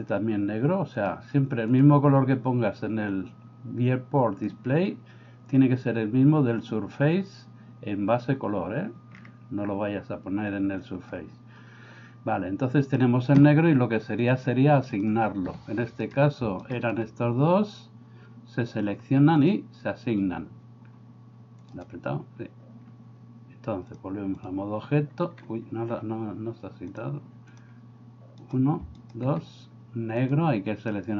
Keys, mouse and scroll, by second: 14.2-15.1 drag, 19.4 click, 21.7 click, 23.9 click, 27.0 click.